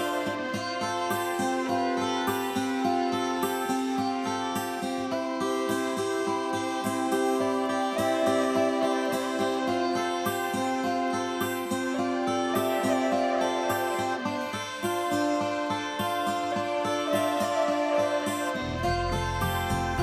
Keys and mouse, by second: 0.7 middle click, 1.0 middle click, 1.1 click, 1.1 shift+Tab, 1.2 click, 1.3 middle click, 1.4 middle click, 1.4 click, 1.5 click, 1.7 click, 1.7 click, 3.8 middle click, 4.1 middle click, 4.3 click, 4.4 middle click, 4.6 click, 4.6 click, 4.8 middle click, 4.9 middle click, 5.2 middle click, 5.3 click, 5.3 shift+d, 5.4 click, 5.4 click, 5.4 1, 5.5 middle click, 5.6 click, 5.8 middle click, 5.9 click, 5.9 middle click, 6.2 middle click, 6.3 click, 6.4 click, 6.9 click, 7.0 Tab, 7.1 Tab, 7.1 click, 7.2 click, 7.3 click, 7.4 click, 7.8 Return, 7.8 1, 7.9 middle click, 8.2 middle click, 8.3 click, 8.4 click, 8.5 click, 8.5 middle click, 8.7 middle click, 8.7 click, 8.8 click, 8.9 click, 9.3 middle click, 9.6 middle click, 9.7 middle click, 9.8 click, 9.8 shift+Tab, 9.9-12.9 typing, 10.0 Return, 10.1 click, 10.1 click, 10.2 click, 10.3 click, 10.4 click, 10.5 click, 10.8 click, 11.0 click, 11.2 click, 11.2 middle click, 11.2 middle click, 11.3 middle click, 11.4 click, 11.5 shift+Tab, 11.5 middle click, 11.6 middle click, 11.7 middle click, 11.8 click, 12.0 click, 12.1 middle click, 12.2 click, 12.4 click, 12.8 click, 12.9 click, 14.5 Tab, 14.5-15.0 typing, 14.6 click, 14.9 click, 15.0 click, 15.0 click, 15.0 middle click, 16.1 Delete, 16.7 click, 16.7 d, 16.7 y, 17.4 g, 17.4 x.